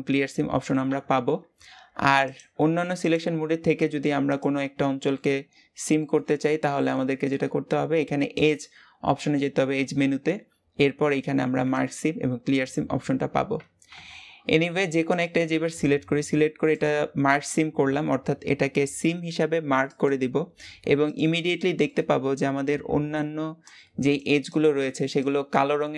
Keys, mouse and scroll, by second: 2.1 click, 2.8 click, 4.2 click, 4.8 middle click, 5.2-6.0 scroll up 1, 6.0-15.0 shift+middle drag, 15.0 click, 15.6 click, 20.4-21.0 scroll up 1, 21.0 click, 21.5 shift+middle click, 21.9-25.9 scroll up 1.